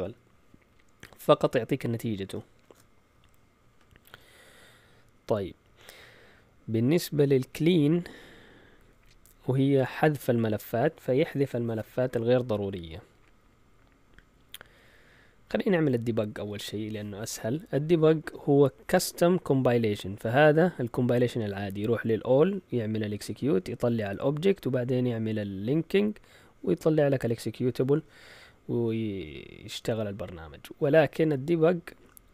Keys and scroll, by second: 2.6 shift+super+z, 5.5 Down, 5.7 Down, 5.8 Down, 6.0 Down, 6.3 Down, 6.5 Down, 6.6 Down, 6.8 Down, 7.0 Down, 7.4-7.9 typing, 15.5 Up, 15.8 typing.